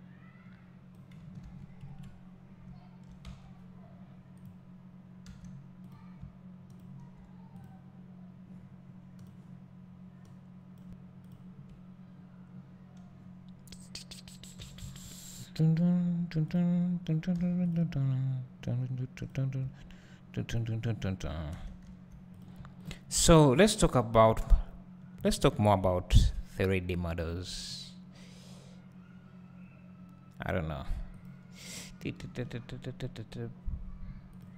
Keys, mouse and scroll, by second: 1.9 KP_Decimal, 5.2 2, 6.0 click, 6.8 shift+click, 7.6 click, 10.7 click, 14.6 e, 17.4 3, 17.8 click, 19.3-22.5 drag, 19.7 1, 21.6 3, 21.9 2, 25.2 ctrl+b, 31.3 click, 32.2 ctrl+r.